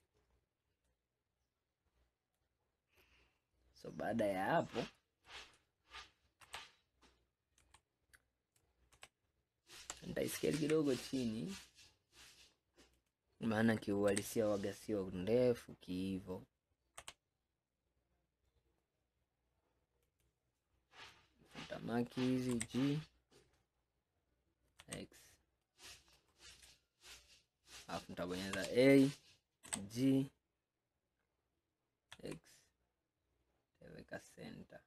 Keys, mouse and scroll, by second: 0.4-0.9 scroll down 2, 1.0-3.9 middle drag, 3.9 scroll up 2, 4.5 scroll up 3, 5.1-6.5 middle drag, 6.5 KP_1, 7.7 KP_3, 9.0 ctrl+KP_7, 10.6 s, 14.2 g, 21.1 click, 22.6 g, 26.7 scroll down 2, 27.3 scroll up 1, 28.6 a, 29.7 g.